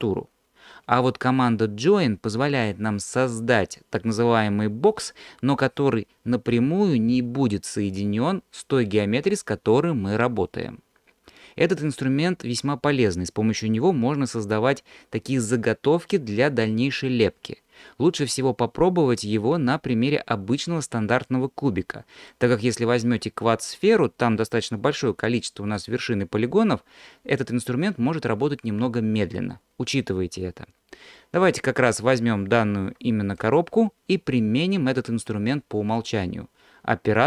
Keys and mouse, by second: 19.6-22.3 middle drag, 32.0 middle click, 32.9 alt+click.